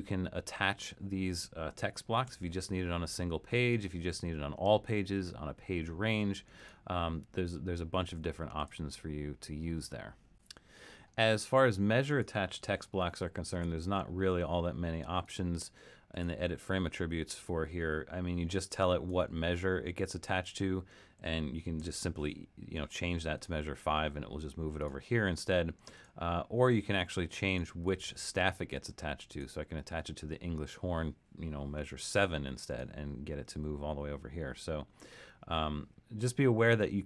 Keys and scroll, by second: 2.3 1, 12.8 super+=, 13.5 super+=, 21.8 5, 31.8 7.